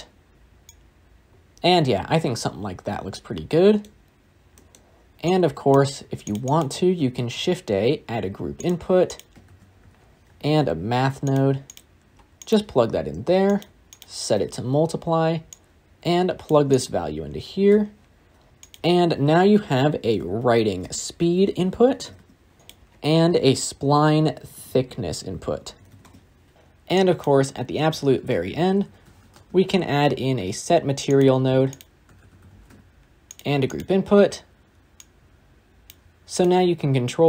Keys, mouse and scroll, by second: 1.5-1.9 scroll down 2, 8.5 shift+a, 11.2 shift+a, 12.3 g, 14.3-16.4 drag, 17.6 n, 22.0 e, 22.6 ctrl+z, 25.9 s, 26.5 scroll up 1, 26.8 click, 27.4-27.9 scroll up 9, 27.9 shift+a, 28.7 s, 32.1 shift+a, 34.1 middle click, 34.9 drag, 36.2 click.